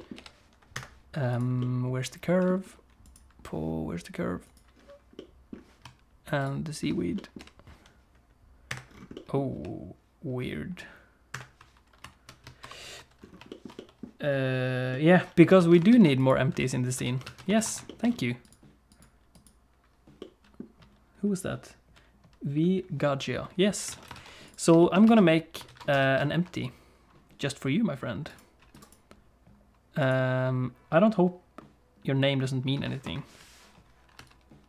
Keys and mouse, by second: 0.1 g, 1.3 click, 1.6 middle click, 4.4 click, 5.2 middle click, 6.4 shift+click, 7.2 middle click, 7.4 g, 9.1 click, 9.5 g, 12.6 shift+h, 13.5 shift+middle click, 13.8 middle click, 14.9 middle click, 15.6 alt+a, 15.9 ctrl+s, 16.2 click, 16.5 Tab, 17.0 Tab, 17.2 alt+a, 17.6 ctrl+s, 17.9 shift+click, 19.0 click, 20.2 middle click, 23.9 alt+a, 24.2 ctrl+s, 24.4 click, 24.8 shift+middle click, 25.1 alt+a, 25.7 ctrl+s, 26.0 shift+a, 28.8-30.1 right drag, 33.0 F2.